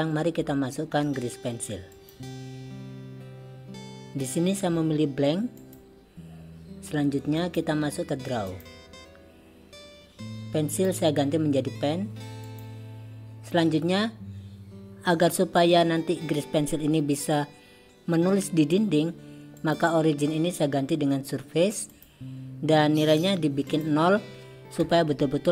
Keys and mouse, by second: 7.5-8.7 drag, 11.0-12.7 drag, 19.7-25.5 drag.